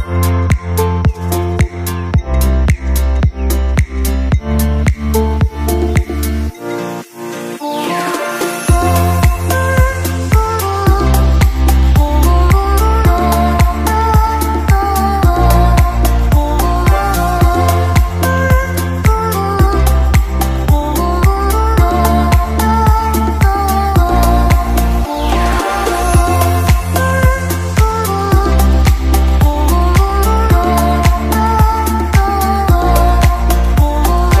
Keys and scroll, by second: 25.4 space.